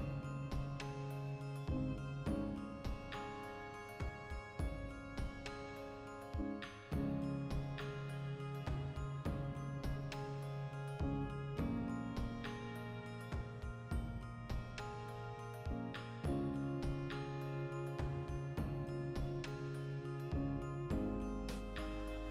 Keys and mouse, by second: 0.6 b, 2.1 g, 2.9 click, 3.2 right click, 3.8-14.4 ctrl+middle drag, 5.2 z, 10.9 alt+q, 12.6 alt+h, 14.4 right click, 14.6-15.9 ctrl+shift+middle drag, 15.6 3, 15.9 alt+right click, 16.1 middle click, 16.7 right click, 17.2 click, 17.5 middle click, 17.7 shift+right click, 18.3-20.8 middle drag, 19.3 x, 20.8-22.3 alt+shift+right drag.